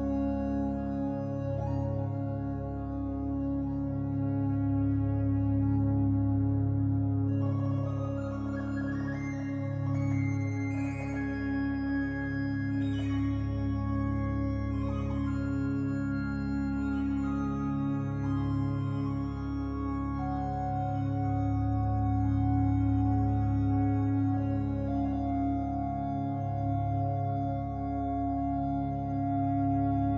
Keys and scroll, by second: 0.6 g, 1.4 e, 12.2 r, 13.0 e, 14.5 ctrl+r, 15.7 3, 17.7 1, 19.1 g, 21.9 g, 23.1 g, 24.9 g, 26.0 z, 26.9 3, 27.8 e.